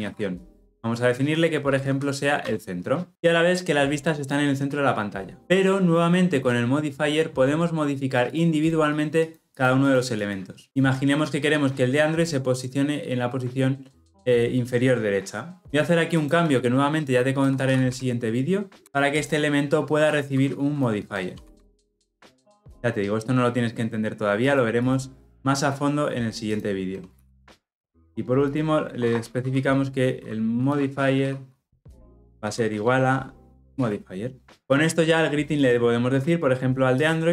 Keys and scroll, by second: 18.8 Return, 22.5 Return, 32.7 Return.